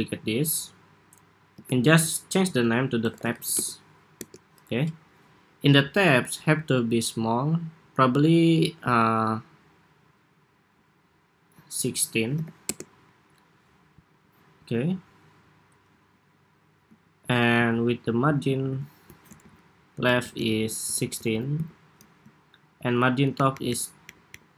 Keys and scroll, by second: 1.3 super+r, 19.1 alt+shift+Right, 19.9 alt+Right, 20.6 alt+Left, 20.7 alt+Left, 21.1 alt+Left, 21.3 alt+Left, 23.0 alt+Up, 23.4 alt+Up, 23.8 alt+Up, 24.0 alt+Up.